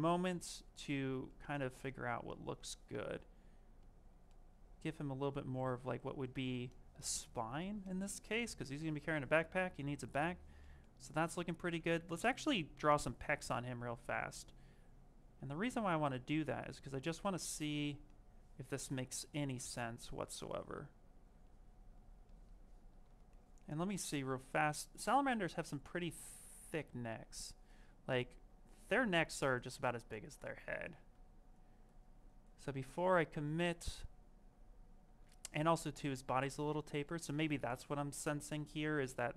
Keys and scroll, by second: 11.8 d.